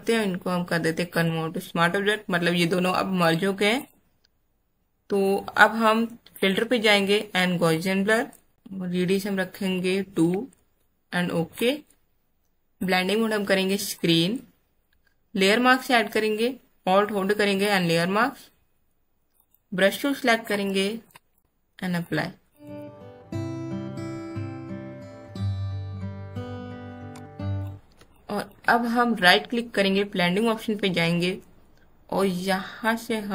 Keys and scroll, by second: 10.3 KP_2, 22.9 space, 23.7 space, 26.2 space, 27.1 space.